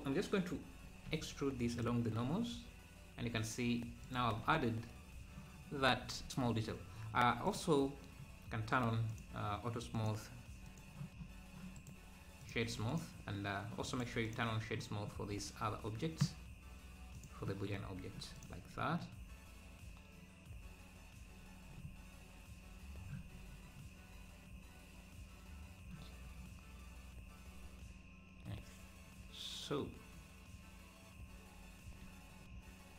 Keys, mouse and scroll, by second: 1.0 alt+e, 4.4 Tab, 7.0 scroll down 1, 7.5-11.7 drag, 12.6-15.3 right drag, 17.6 click, 17.6 scroll down 2, 18.4 click, 23.3 scroll down 1, 23.7 scroll up 4.